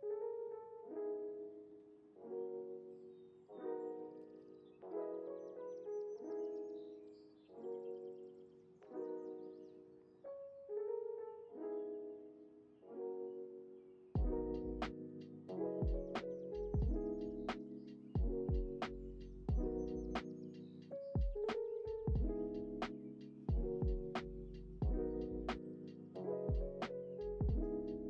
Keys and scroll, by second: 4.0 F9, 4.7 x, 7.2 ctrl+c, 7.2 x, 7.9 ctrl+v, 10.0 ctrl+c, 10.3 x, 11.2 ctrl+v, 12.0 x, 14.8 ctrl+v, 16.2 x, 16.7 ctrl+v, 17.7 ctrl+s, 21.4 ctrl+s, 23.8 space.